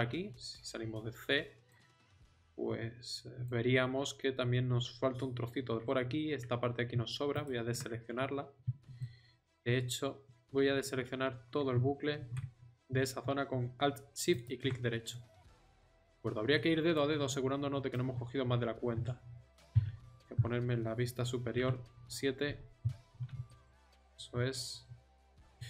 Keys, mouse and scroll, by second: 0.0 z, 12.2 ctrl+z, 18.9 KP_7, 19.7 KP_7.